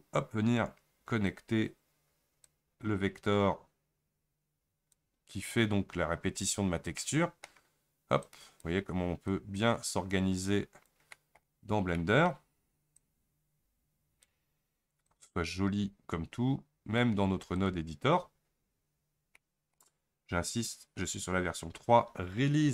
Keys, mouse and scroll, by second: 1.3-7.1 drag, 7.1-13.0 middle drag, 13.0 click, 15.1 click.